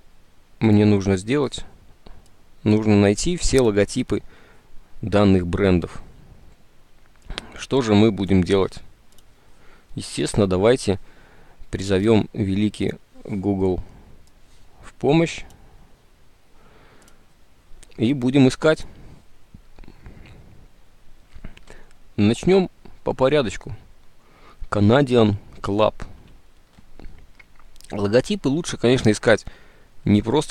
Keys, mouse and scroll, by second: 26.2 alt+Tab.